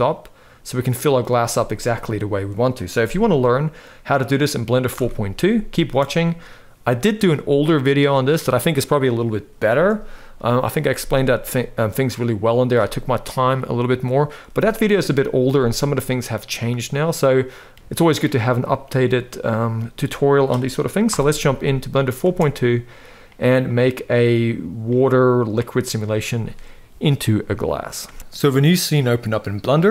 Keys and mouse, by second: 4.6 shift+Left, 5.5 space, 9.3 space, 11.1-12.3 middle drag, 15.5-17.8 middle drag, 19.4-20.0 middle drag, 20.8 shift+Left, 21.9 space, 27.8 space, 28.9 click.